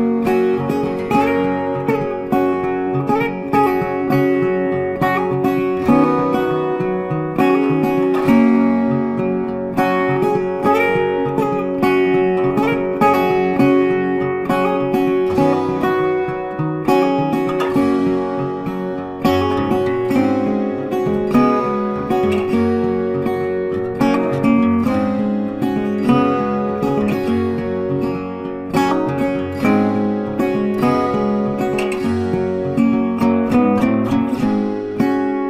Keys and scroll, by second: 11.7 ctrl+t.